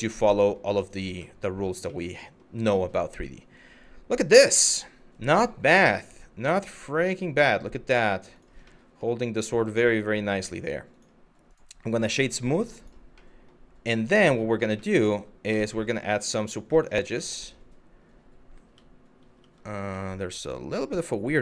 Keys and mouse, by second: 0.4 click, 0.8-1.3 middle drag, 1.5-2.0 middle drag, 2.2-7.6 middle drag, 7.9 click, 8.4 middle drag, 12.4 click, 12.9 middle drag, 13.6 middle drag, 14.5 middle click, 15.1 KP_Divide, 15.8 middle drag, 16.6-17.4 middle drag, 18.4 Tab, 19.0 Tab, 19.7 middle click.